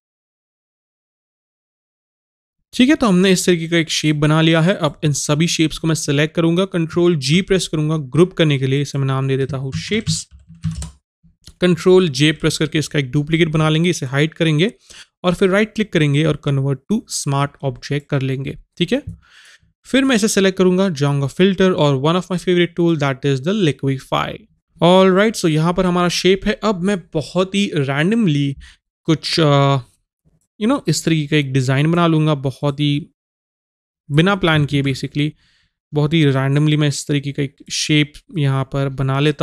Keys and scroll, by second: 34.7 ctrl+z.